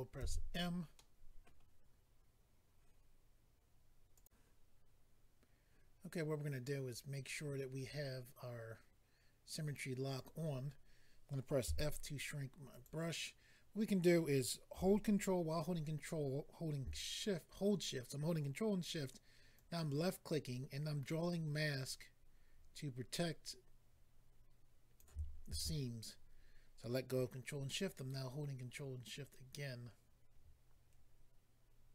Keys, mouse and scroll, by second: 0.2 alt+m, 0.9 middle click, 4.1 click, 4.2 click, 6.8-7.7 scroll down 4, 10.1 click, 10.2 click, 11.6 f, 12.7 click, 12.8 click, 19.5 ctrl+click, 27.7 ctrl+click.